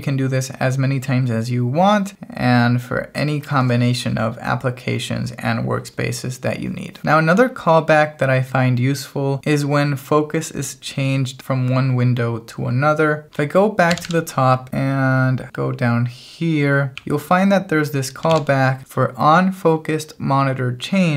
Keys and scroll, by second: 7.0 shift+g, 13.9-16.9 typing, 18.3 shift+v.